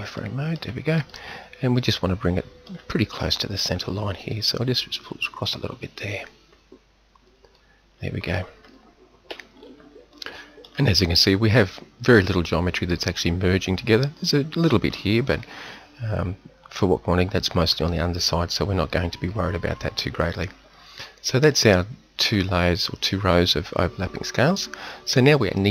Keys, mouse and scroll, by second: 0.2-1.0 scroll down 2, 0.3 middle click, 4.3 click, 4.9 click, 8.0 middle click, 8.2 middle click, 8.5 middle click, 8.8 middle click, 9.2 z, 18.4 middle click, 19.2 KP_7.